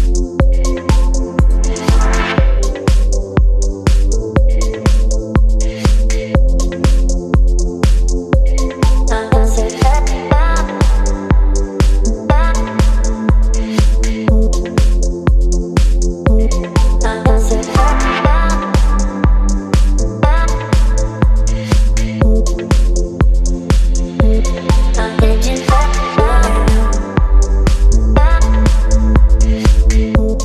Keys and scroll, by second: 3.8 space, 7.2 space, 10.7 space, 13.4 space, 16.1 space, 17.8 space, 22.7 v.